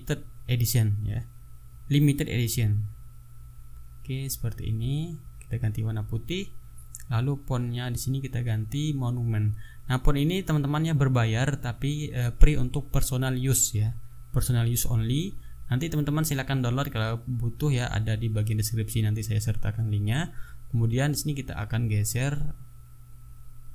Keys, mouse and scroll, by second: 0.0-1.1 typing, 2.8 n, 3.3 ctrl+a, 4.7 click, 5.6 click, 6.6 click, 8.5 click, 9.9-11.2 typing, 12.2 click, 13.8 click, 14.9 click, 16.3 KP_3, 16.5 KP_0, 16.9 Return, 18.9 click.